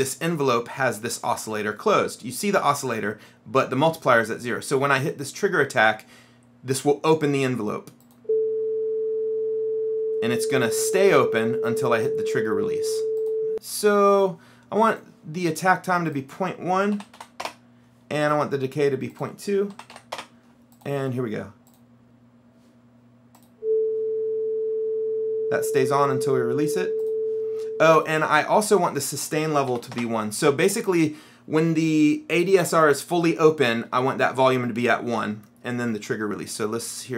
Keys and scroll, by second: 17.1 KP_Decimal, 17.3 KP_1, 17.5 Return, 19.8 KP_Decimal, 20.0 KP_2, 20.3 Return, 29.8 KP_1, 30.0 Return.